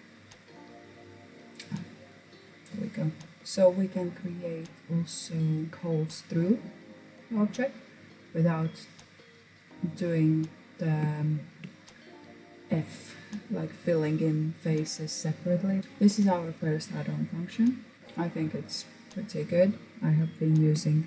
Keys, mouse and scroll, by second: 1.1-5.7 middle drag, 5.9-6.3 scroll down 2, 6.3 middle click, 7.2-7.8 scroll up 4, 7.8 click, 8.2-8.7 scroll down 4, 8.7 click, 9.1-10.2 scroll up 6, 10.2 shift+middle click, 10.8-13.8 scroll up 2.